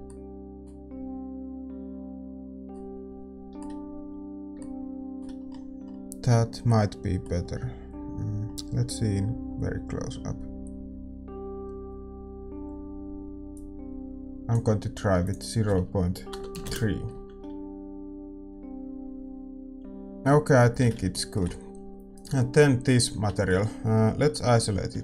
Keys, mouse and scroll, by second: 18.5-21.0 drag, 18.5-20.0 middle drag, 21.0-25.0 middle drag, 21.0 shift+z.